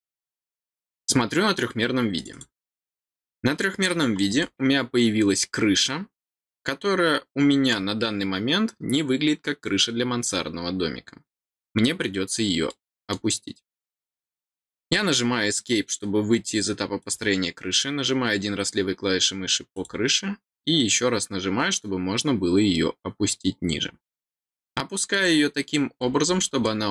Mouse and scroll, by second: 2.1 click, 2.3 click, 3.4 scroll down 1, 4.4-7.7 middle drag, 11.5-11.8 scroll down 1, 12.6 middle click, 17.0 click, 19.7 click, 25.1 click, 26.6-26.9 middle drag.